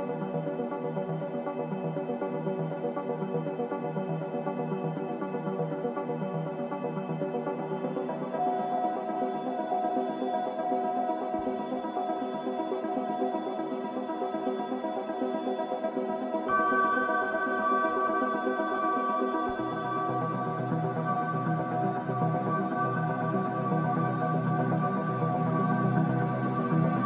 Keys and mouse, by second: 7.3 click, 9.1 g, 18.3 Tab, 22.0 click, 25.3 g.